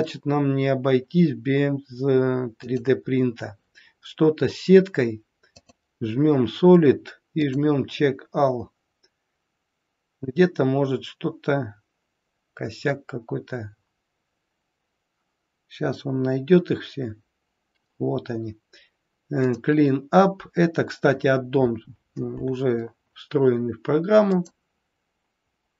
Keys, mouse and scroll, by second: 2.5 click, 5.5 click, 19.5 click, 24.3 click.